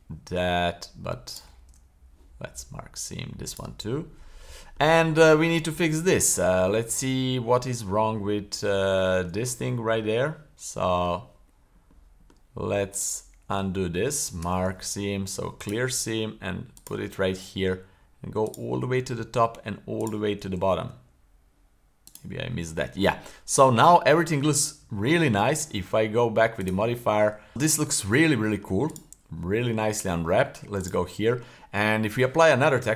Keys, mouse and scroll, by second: 1.3 shift+right click, 1.7 w, 4.1-4.7 middle drag, 5.2-5.6 scroll up 1, 5.6-6.0 middle drag, 6.4-6.7 shift+middle drag, 6.9-7.6 middle drag, 7.9-8.8 middle drag, 8.9-9.3 shift+middle drag, 9.5-11.1 middle drag, 11.3-11.8 middle drag, 11.9-12.3 middle drag, 12.9 right click, 14.4 w, 16.7 right click, 17.2 scroll up 2, 18.5 shift+right click, 20.0 shift+right click, 20.8 w, 22.7-23.1 middle drag, 23.1-24.0 scroll down 4, 24.0-24.5 middle drag, 24.5-24.9 scroll down 2, 24.9 shift+middle click, 25.4 middle click, 26.6 click, 27.5 middle click, 27.5 scroll down 1, 27.9 middle drag, 28.3 middle click, 28.9 right click, 29.3 middle click, 29.9 Tab, 30.3 middle click, 30.8-31.1 right drag, 31.1-31.5 middle drag, 31.6 middle click.